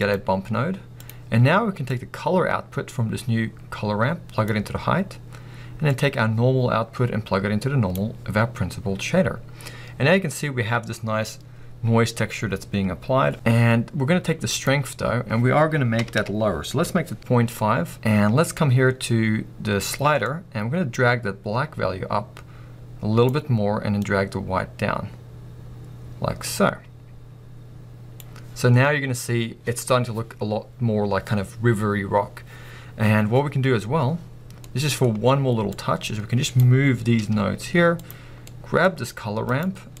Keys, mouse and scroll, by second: 1.2 click, 2.0-40.0 drag, 17.2 Return.